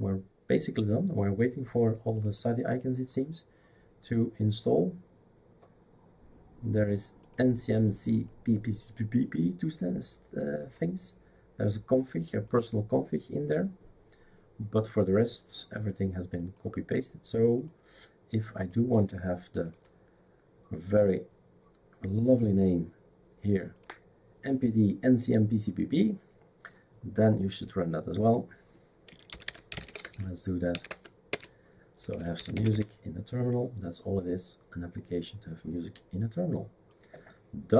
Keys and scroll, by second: 29.0-33.0 typing, 31.3 Return.